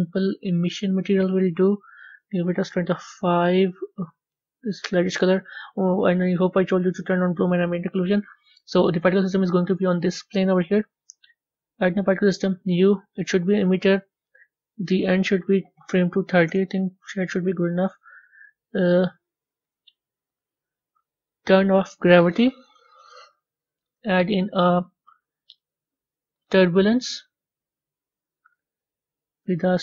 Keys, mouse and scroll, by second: 0.8-3.6 drag, 6.9 click, 7.6-9.1 middle drag, 9.1 click, 12.4 click, 16.4-28.1 drag.